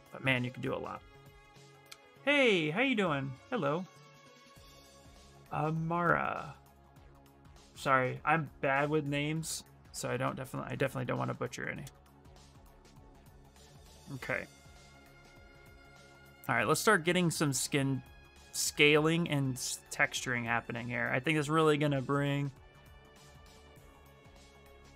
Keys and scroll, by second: 15.5 s.